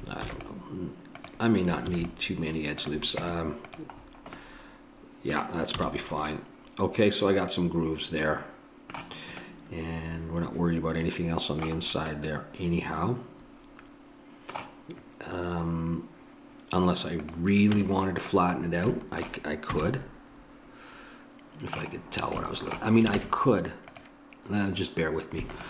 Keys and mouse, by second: 1.9 ctrl+r, 3.2 Tab, 5.8 a, 17.2-18.6 drag, 17.7 Tab, 19.8 a, 22.0-23.2 middle drag, 23.2 ctrl+Tab, 25.5-25.6 drag.